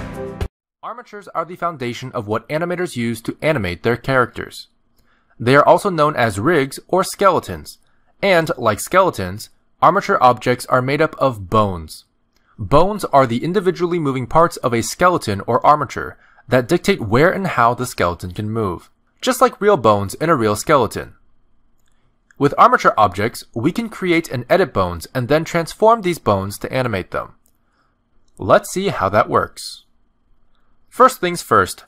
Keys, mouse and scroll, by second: 9.7 middle click, 10.7 ctrl+Tab, 11.1 click, 11.5 r, 12.7 r, 14.2 click, 14.7 middle click, 14.9 r, 16.5 middle click, 17.0 click, 17.4 middle click, 17.6 r, 19.3 middle click, 20.6 click, 21.0 r, 22.5 middle click, 23.0 r, 24.4 middle click, 25.2 click, 25.5 r, 26.6 r, 27.6 r, 28.5 click, 28.8 g, 29.8 middle click.